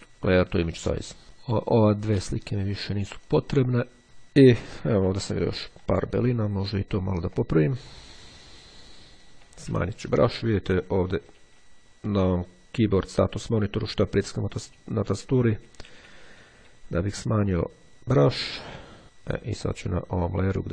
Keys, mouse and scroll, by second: 0.5 click, 1.2 click, 2.1 click, 3.4 click, 4.6-5.2 ctrl+scroll up 2, 5.4-6.4 ctrl+middle drag, 6.4-7.0 ctrl+scroll up 2, 7.2-7.8 ctrl+scroll up 3, 8.0 click, 9.0 [, 10.9 [, 11.6 ], 13.5 [, 14.0 ], 15.2 ], 15.6 [, 17.5-18.6 drag, 19.0 click, 19.8-20.7 drag.